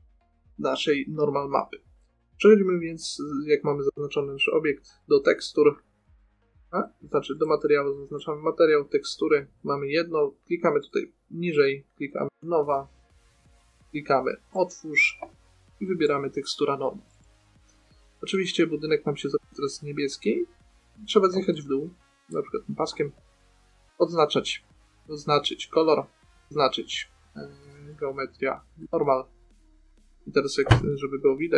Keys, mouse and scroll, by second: 3.6-10.1 drag, 11.2-12.9 drag, 13.0-14.8 middle drag, 18.7 middle click, 23.3-24.5 drag, 26.4-28.0 drag, 29.2-31.5 drag.